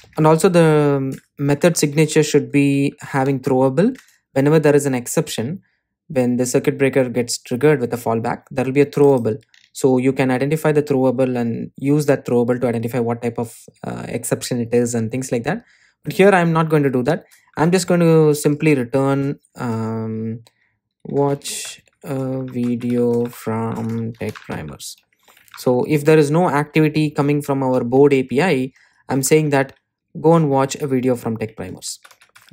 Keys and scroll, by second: 3.5 Return, 18.5 Return, 28.5 Delete, 29.4 super+z, 31.3 Delete.